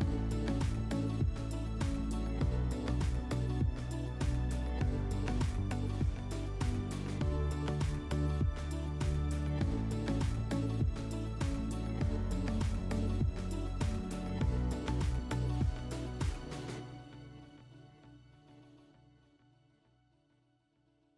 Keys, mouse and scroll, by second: 0.1 click, 3.0 click, 7.8 click, 9.2 click, 11.8 click, 14.0 click, 15.7 click, 17.6 click, 20.5 click.